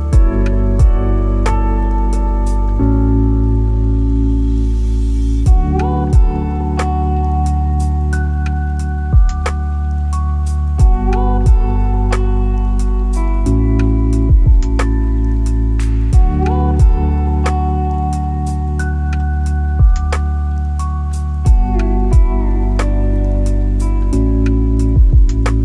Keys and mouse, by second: 0.6 middle click, 1.8 g, 2.0 y, 6.7 g, 7.1 x, 9.9-10.2 middle drag, 11.4 g, 11.6 y, 13.2-13.8 drag, 14.6-15.8 drag, 17.2 click, 20.1 click, 21.8-22.1 shift+middle drag, 22.6 click, 23.8 shift+d, 24.4 x.